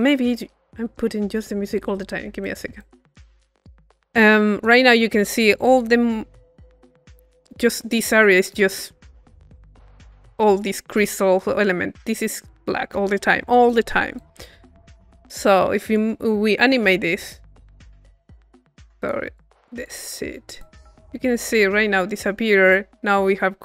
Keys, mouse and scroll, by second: 0.9-3.0 middle drag, 4.1 middle click, 4.6-7.4 drag, 14.2-16.3 drag, 17.1 click, 17.7 click, 19.0 click, 19.4 click, 20.2 click, 20.6-23.2 drag.